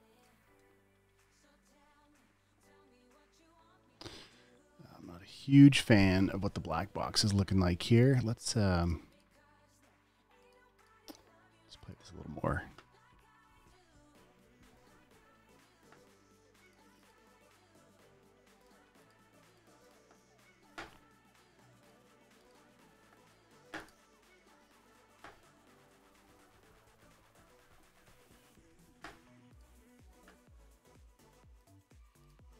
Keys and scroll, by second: 0.8 super+d, 0.9 v, 1.9 super+s, 2.4 super+w.